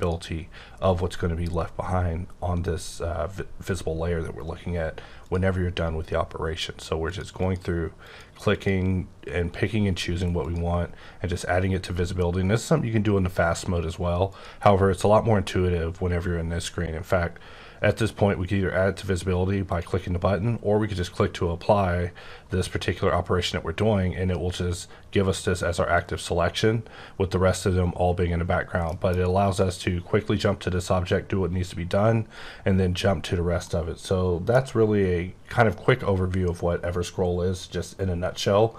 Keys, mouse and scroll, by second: 0.0 click, 5.2 click, 7.1 click, 7.4 click, 8.0 click, 8.5 click, 10.4 click, 14.2 click, 19.6 click, 25.9 click, 28.9 middle click, 29.1 scroll up 3, 33.8 middle click.